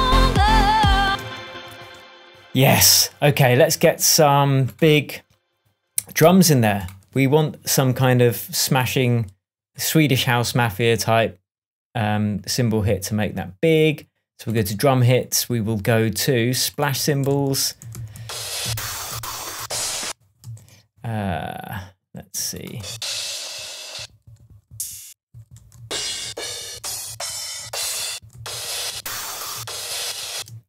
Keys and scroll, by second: 1.0 space, 1.4 super+s, 6.2 super+t, 16.9 Right, 17.2 Up, 17.8 Down, 17.9 Right, 18.1 Down, 20.4 Left, 22.8 Up, 24.4 Right, 24.6 Down, 25.2 Up, 25.5 Right, 25.7 Down, 28.1 Right, 28.3 Down, 29.5 Up, 30.3 space.